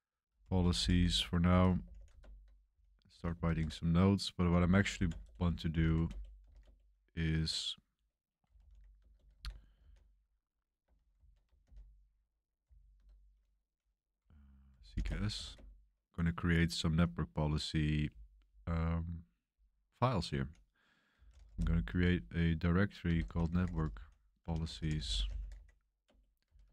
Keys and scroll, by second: 0.0-3.1 typing, 2.2 super+Return, 3.4 super+3, 4.3-9.1 typing, 9.3 ctrl+c, 9.7 ctrl+d, 11.1 ctrl+c, 11.6 ctrl+l, 12.6-12.9 typing, 14.5-15.9 typing, 20.8-26.7 typing, 26.0 Return.